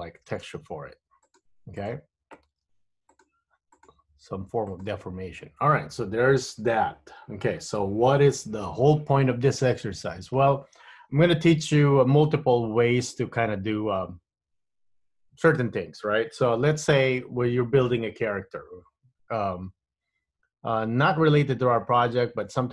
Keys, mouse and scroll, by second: 0.8 v, 2.0 click, 2.8 g, 3.9 click, 4.0 g.